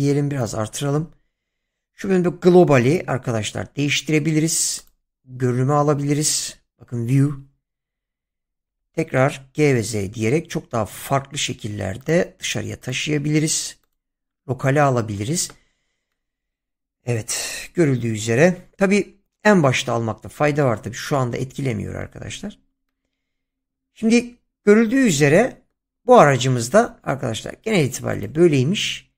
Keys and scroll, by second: 8.7 g, 9.5 z.